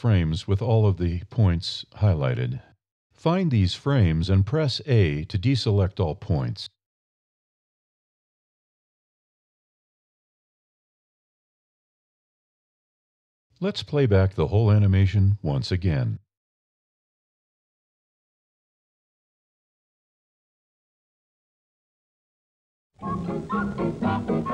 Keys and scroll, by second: 6.3 alt+a, 8.0 Down, 8.9 a, 9.3 Up, 10.0 Up, 10.9 Down.